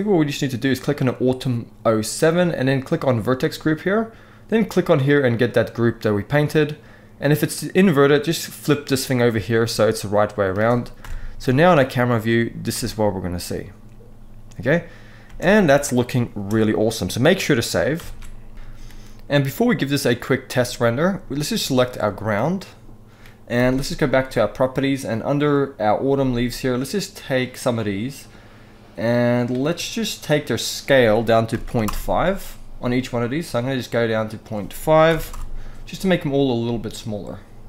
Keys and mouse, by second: 1.0 click, 2.9 click, 4.2-5.6 drag, 8.4 click, 9.3-10.1 middle drag, 10.7 KP_0, 12.4 space, 15.0 space, 15.5 shift+click, 16.2 n, 17.8 ctrl+s, 21.1 click, 21.6-21.9 middle drag, 23.2 n, 30.3-31.6 drag, 33.2-35.9 drag.